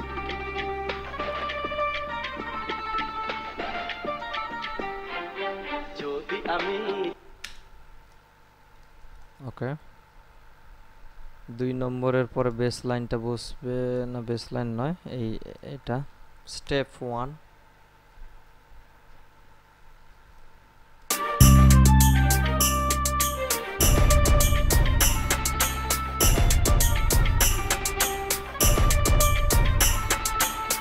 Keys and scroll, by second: 7.4 space, 21.3 space.